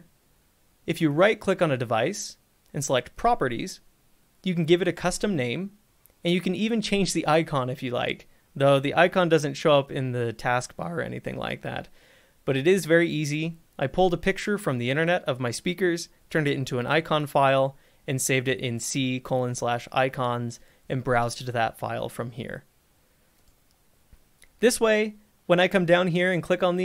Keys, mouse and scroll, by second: 0.0 click, 1.3 right click, 3.3 click, 6.6 click, 12.6 click, 23.7 click.